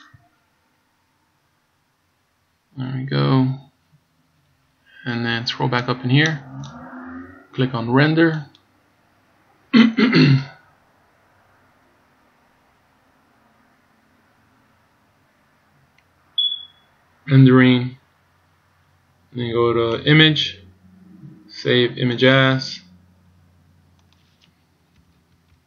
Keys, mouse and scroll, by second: 0.2 click, 5.0-5.6 scroll up 8, 6.0 click.